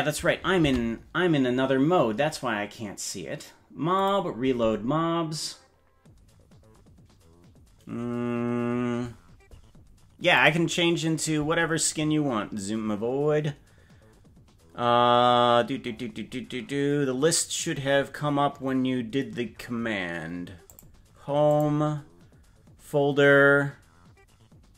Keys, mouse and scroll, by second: 0.7 ctrl+Tab, 3.9-7.5 drag.